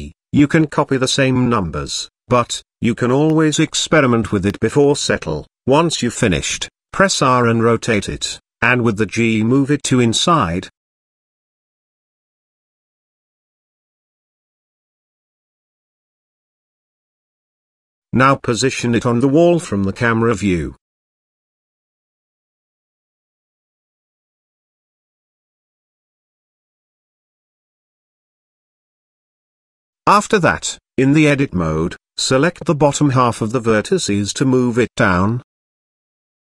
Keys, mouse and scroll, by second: 0.6-1.0 middle drag, 1.7 shift+middle drag, 3.3 shift+middle click, 4.9 r, 7.3 middle drag, 7.9 middle click, 8.1-8.6 scroll down 1, 8.6 g, 12.2-13.0 scroll up 1, 13.4 g, 15.5-16.0 middle drag, 16.9-17.5 scroll up 1, 17.8 KP_0, 18.9 g, 20.8 g, 29.7 KP_Decimal, 30.5 scroll up 1, 31.3 Tab, 32.9 shift+middle click, 33.9 click.